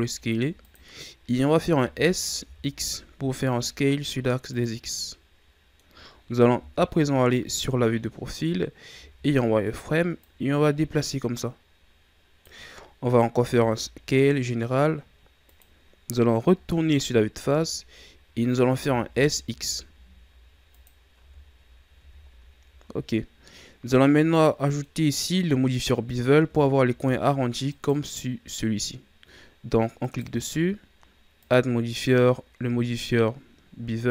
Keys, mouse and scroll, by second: 1.7 s, 4.8 scroll down 1, 4.9-6.5 middle drag, 6.5 KP_3, 7.9-8.5 ctrl+scroll down 3, 8.5-8.9 scroll up 1, 8.9 z, 10.2-12.6 drag, 12.6-13.4 scroll up 3, 13.4 s, 16.5 KP_1, 17.4 z, 18.7 s, 21.2 Tab, 22.0 a, 22.2-22.8 scroll down 3, 22.8-23.2 scroll down 3, 23.2-23.8 scroll up 4, 23.8-24.9 middle drag, 24.9-25.7 scroll up 2, 25.7 right click, 26.6-27.7 ctrl+scroll up 4, 27.7 right click, 30.0 right click, 31.4-34.1 drag.